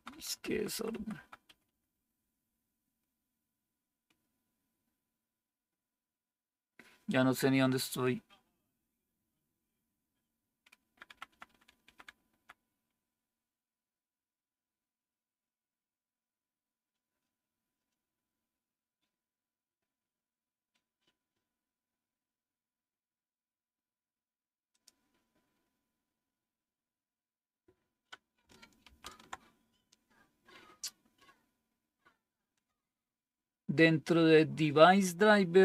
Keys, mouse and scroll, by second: 0.1 Down, 0.2 Down, 0.4 Down, 0.6 Down, 0.8 Down, 1.0 Down, 1.4 Up, 1.8 Up, 2.0 Up, 2.1 Up, 2.4 Up, 11.0 Down, 11.2 Down, 11.4 Down, 11.6 Down, 11.7 Down, 28.8 ctrl+-.